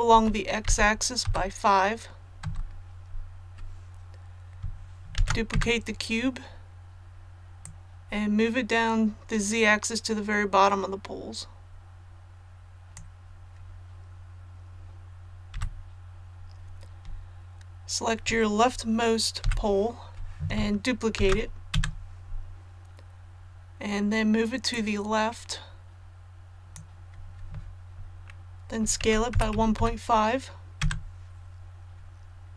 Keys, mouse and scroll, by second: 0.1-1.2 typing, 5.1 shift+d, 7.6-13.4 drag, 15.5 a, 19.4 i, 21.1 shift+d, 24.7-27.4 drag, 29.0 s, 29.3 KP_1, 29.5 KP_Decimal, 29.7 KP_5.